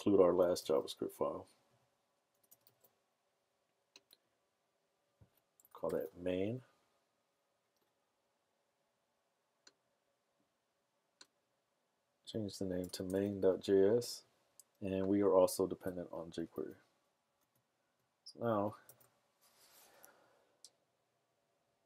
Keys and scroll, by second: 2.7 super+v, 5.5-6.4 typing, 12.8-13.5 typing, 14.8 typing, 16.4 super+s, 17.5 super+Tab, 20.4 super+r.